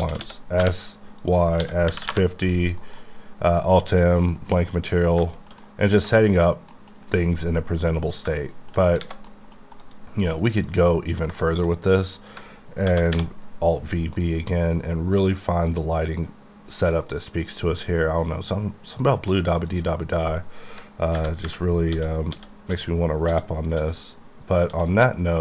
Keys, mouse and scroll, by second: 0.0-2.1 typing, 1.3 click, 2.2 KP_Enter, 2.8 alt+m, 3.9 click, 4.6 middle click, 5.2 shift+middle click, 5.3 shift+scroll down 1, 5.4 shift+middle click, 5.7 middle click, 6.1 shift+middle click, 6.5 middle click, 8.3 shift+middle click, 9.0 alt+a, 9.3 middle click, 10.3 alt+m, 10.7 click, 11.4 shift+middle click, 12.9 v, 13.2 b, 13.5 scroll up 2, 14.3-15.3 scroll up 2, 15.3 scroll down 1, 19.8 click, 21.2-24.7 typing.